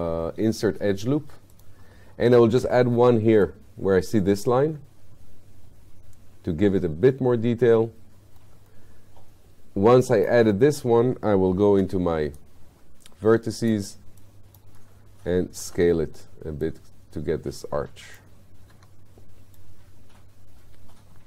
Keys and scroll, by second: 11.7 q, 15.7 r, 18.8 w.